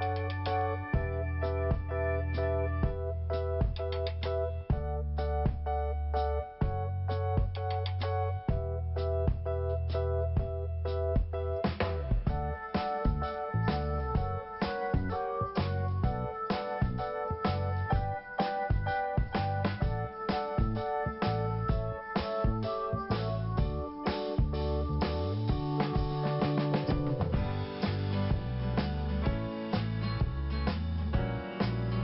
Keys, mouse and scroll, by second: 0.5 click, 2.3 click, 3.3 click, 4.6 click, 5.7 click, 6.9-7.5 scroll down 1, 7.5 scroll up 1, 8.6 click, 10.1 click, 12.5 click, 13.5 scroll down 1, 15.0 click, 15.9 click, 17.7 scroll down 1, 20.5-20.9 scroll up 2, 21.8 click, 22.6 scroll down 1, 23.4 scroll up 2, 24.8 scroll down 1, 26.0 click, 26.6 click, 27.9 scroll down 2, 29.0 click, 29.6 scroll down 1, 30.4 scroll up 1, 31.6 click.